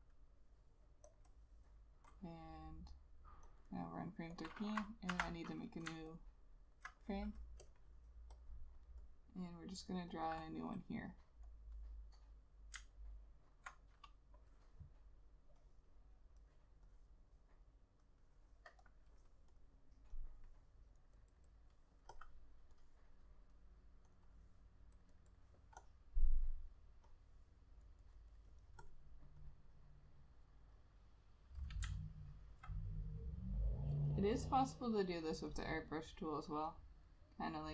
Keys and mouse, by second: 0.0 double click, 3.8 double click, 5.6 F6, 6.3 alt+click, 10.4 double click, 13.1 alt+click, 21.3 double click, 31.9 click, 32.1 alt+click.